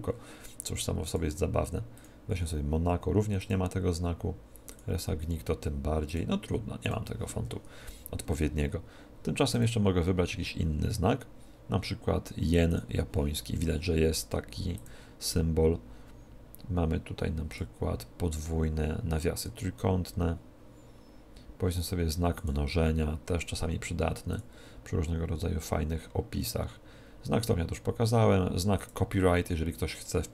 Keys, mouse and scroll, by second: 1.0-3.0 drag, 3.4-5.3 drag, 6.0-7.8 drag, 7.8 Tab, 9.5-11.3 drag, 14.7-16.5 drag, 19.3-21.1 drag, 24.2-26.2 drag.